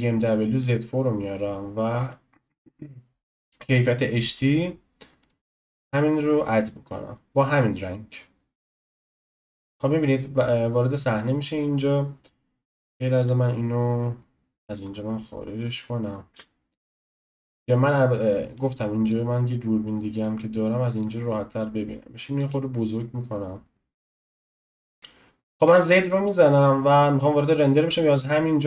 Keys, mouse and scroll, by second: 7.7-16.4 drag, 14.2 scroll, 14.3-14.8 scroll down 1, 14.8-16.3 scroll, 16.4 n, 16.4 n, 16.9-17.5 scroll up 3, 18.5-22.4 drag, 22.4 s, 25.0 click, 25.6 z.